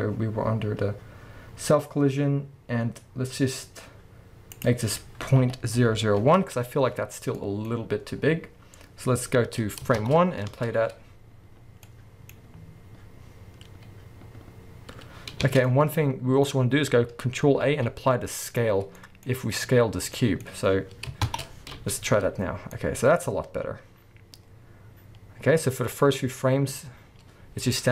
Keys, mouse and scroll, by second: 0.1-4.2 scroll down 1, 4.5-7.4 drag, 5.9 0, 6.5 Return, 7.4-12.2 middle drag, 7.7-8.2 scroll up 1, 8.2-9.6 scroll down 1, 10.0 shift+Left, 10.5 space, 15.6 space, 15.7 middle click, 16.5-17.3 scroll down 1, 17.3-17.7 scroll up 1, 17.7 ctrl+a, 19.0 middle click, 19.3-20.0 scroll up 1, 20.0 scroll down 1, 20.2 middle click, 21.3 shift+Left, 21.4-27.9 middle drag, 21.7 space.